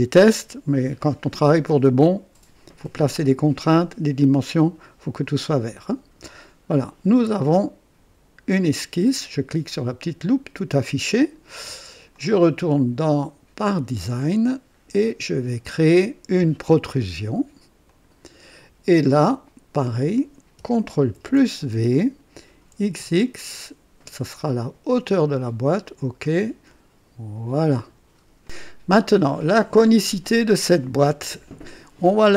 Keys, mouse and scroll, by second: 6.2 click, 9.9 click, 12.1 click, 13.5 click, 14.3-14.8 scroll down 2, 15.0 right click, 17.8 click, 19.7 click, 21.1 ctrl+v, 22.7 x, 22.9 x, 25.0 click, 25.8 click, 27.5 click, 29.7 click.